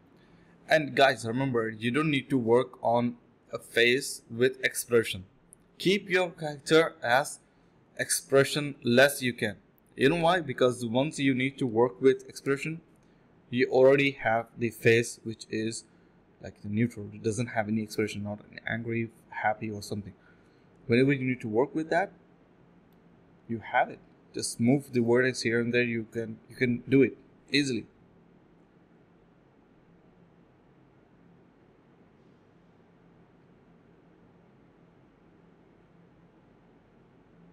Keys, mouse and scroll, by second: 0.1 alt+right click, 0.3 right click, 0.5 f, 0.7 right click, 2.4 right click, 3.4 alt+right click, 3.7 alt+right click, 3.8 alt+right click, 5.1 right click, 5.5 alt+right click, 6.9-7.4 typing, 7.5 right click, 12.2 alt+right click, 14.2 right click, 16.7 ctrl+z, 17.0 typing, 18.2 alt+right click, 18.5 right click, 19.7 alt+right click, 21.2 typing, 21.6 alt+right click, 23.9 right click, 25.3 alt+right click, 26.6-28.2 typing, 29.4 right click, 30.1 scroll down 1, 30.3 middle click, 30.4-30.8 scroll up 1, 32.2 right click, 32.8 right click, 35.4 scroll down 1, 35.5 middle click, 35.7-36.2 scroll up 1, 36.6 ctrl+z, 36.8 typing.